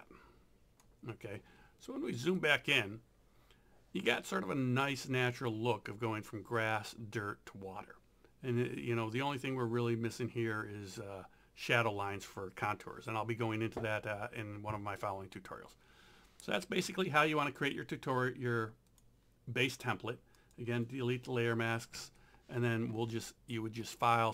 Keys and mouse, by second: 2.2 click, 17.6 right click, 18.9 click, 19.6 right click, 20.4 click, 23.8 click.